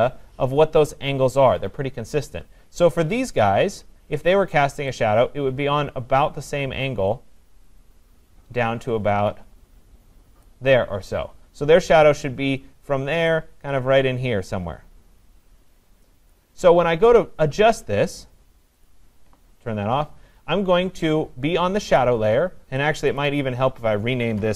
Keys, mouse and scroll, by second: 10.4 click, 16.3 click, 18.9 click, 22.0 click, 23.2 click, 23.4 click.